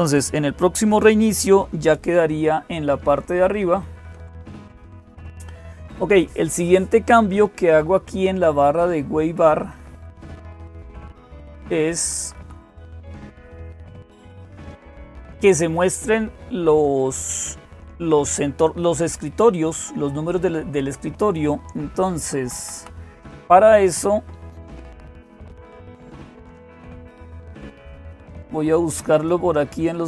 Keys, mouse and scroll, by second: 0.0-30.0 typing, 3.5 ctrl+o, 4.6 Return, 9.5 Down, 9.8 Down, 9.9 Down, 10.1 Down, 10.3-11.3 Down, 11.8 Down, 12.0 Down, 12.4 Down, 12.6 Down, 12.8 Down, 13.2-14.7 Up, 15.1 Up, 15.2 Up, 22.0 Down, 22.2 Down, 22.4 Down, 22.6 Down, 26.1 click, 28.9 click.